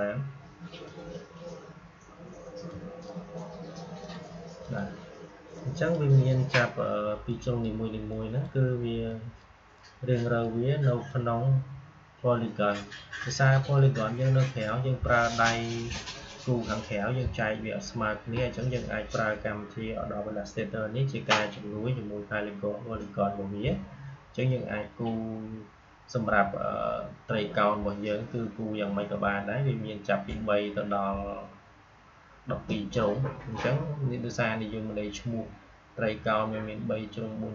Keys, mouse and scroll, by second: 0.6-37.5 drag.